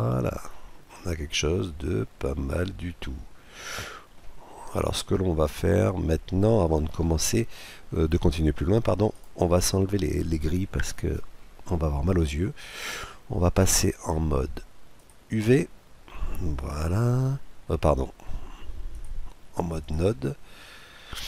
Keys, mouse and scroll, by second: 0.6-1.1 scroll up 1, 1.1-2.9 middle drag, 4.1 scroll up 1, 4.3-4.8 scroll down 1, 4.8-6.6 middle drag, 8.8-10.5 right drag, 13.2-14.9 drag, 15.7-18.8 middle drag, 18.8-20.4 drag, 20.4-21.2 middle drag.